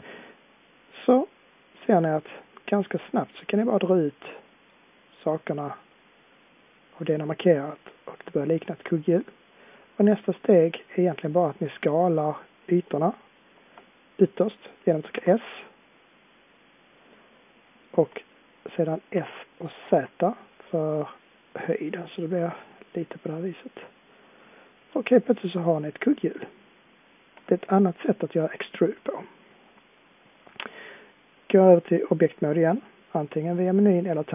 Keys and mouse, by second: 1.5-2.4 middle drag, 6.3 middle click, 7.7 middle click, 11.1-12.2 middle drag, 15.1 s, 19.1 s, 23.2-26.2 middle drag, 33.6-34.3 middle drag.